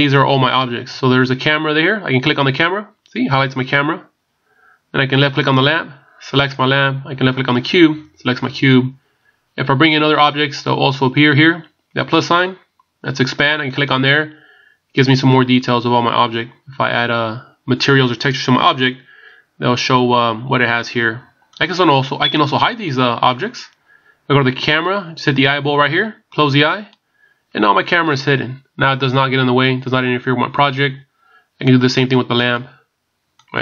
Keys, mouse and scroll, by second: 2.3 click, 5.5 click, 13.7 click, 21.5 click, 26.8 click, 32.5 click, 33.5 click.